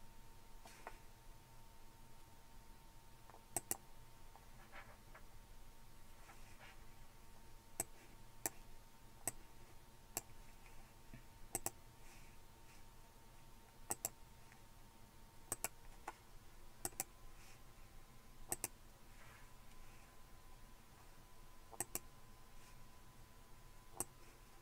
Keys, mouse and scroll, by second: 3.6 click, 7.8 click, 9.3 click, 11.6 click, 13.9 click, 15.5 click, 16.9 click, 18.5 click, 21.8 click, 24.0-24.6 drag.